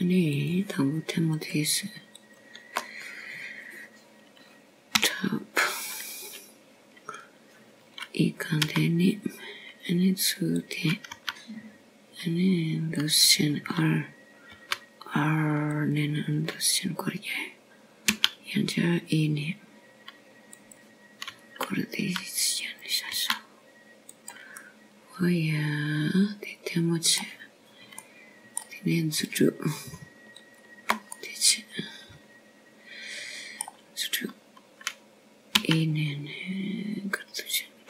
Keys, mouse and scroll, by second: 0.6 click, 3.2 click, 4.2 click, 5.0 shift+click, 7.8 KP_7, 8.7-9.3 scroll down 1, 9.3-10.6 scroll down 2, 11.6 e, 14.0 r, 17.4 g, 21.0 e, 24.8 r, 26.0 s, 27.4 middle click, 30.8 middle click, 32.1 click, 33.3 shift+click, 34.0 middle click.